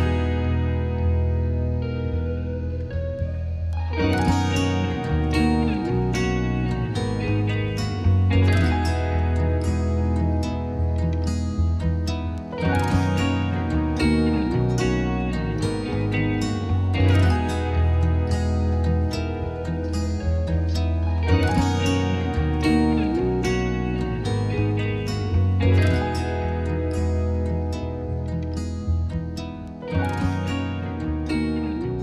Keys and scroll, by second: 6.1-7.2 typing, 7.6 Return, 18.9-19.8 typing, 20.7 Return.